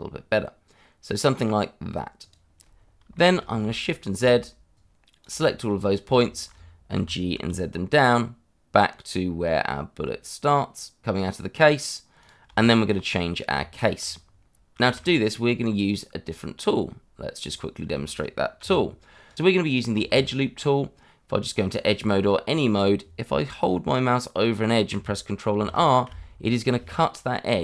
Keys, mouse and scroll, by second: 2.2 click, 2.7 scroll down 1, 3.2 shift+middle click, 3.9 shift+z, 4.7 click, 5.5 middle click, 5.6 shift+middle click, 5.8-6.1 scroll up 1, 6.1 shift+z, 6.9 g, 7.3 z, 12.2 click, 12.5 shift+middle click, 13.5 Tab, 14.2-14.6 scroll down 1, 14.6 click, 15.2 scroll down 1, 15.5 shift+middle click, 15.9 scroll down 1, 16.1 shift+a, 17.4 click, 17.9 shift+middle click, 18.1 middle click, 18.6 g, 19.2 click, 19.5 middle click, 19.6 scroll up 2, 19.8 shift+middle click, 20.1 Tab, 22.4 middle click, 25.5 ctrl+r.